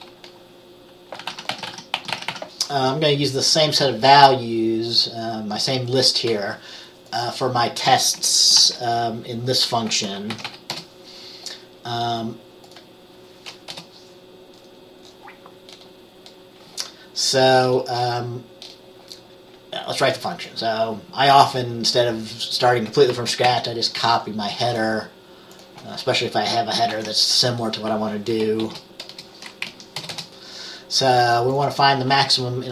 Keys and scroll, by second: 1.2-2.9 typing, 8.7 typing, 10.5 ctrl+x, 10.6 b, 10.8 Return, 13.8 Return, 23.6 ctrl+c, 26.6 Return, 27.0 ctrl+v, 28.7 {, 29.2 Return, 29.8 Down, 30.1 Return, 30.2 Return.